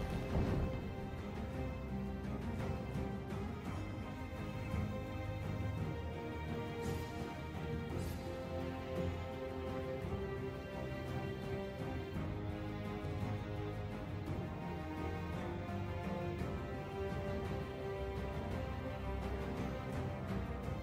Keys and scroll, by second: 0.0-2.8 typing, 3.4 Tab, 4.3 shift+d, 4.4 Escape, 5.3 ctrl+j, 5.5 Delete, 5.6 Delete, 6.6 shift+a, 6.7 Delete, 9.1 Tab, 9.4 Tab, 10.3-11.2 typing, 12.5-17.7 typing, 18.1 Tab, 19.2 shift+d, 19.3 Escape, 20.0 ctrl+j.